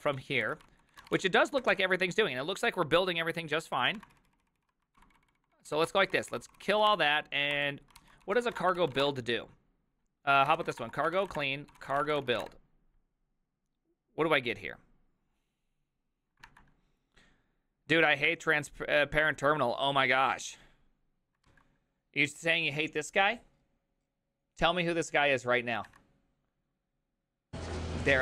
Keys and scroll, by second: 0.1 ctrl+d, 0.6 ctrl+d, 0.7 ctrl+c, 0.8-1.7 typing, 3.8 ctrl+a, 4.0 [, 4.1 ctrl+u, 4.6 ctrl+u, 5.0 ctrl+d, 5.1 ctrl+d, 5.3 ctrl+d, 5.4 ctrl+d, 5.5 ctrl+d, 5.9 ctrl+d, 5.9 ctrl+c, 6.0 ctrl+c, 6.3 ctrl+c, 6.9 ctrl+c, 6.9 Up, 7.5 Up, 8.0-12.9 typing, 9.6 Return, 17.6 alt++, 24.1 alt+{.